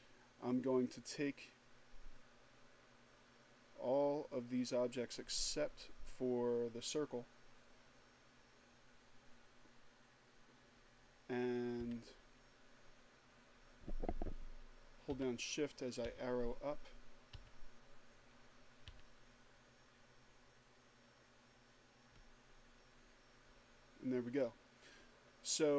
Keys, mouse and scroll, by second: 0.2-6.9 drag, 11.2 Up, 14.6 shift+Up, 15.4 Up, 16.7 Up, 18.2 Up.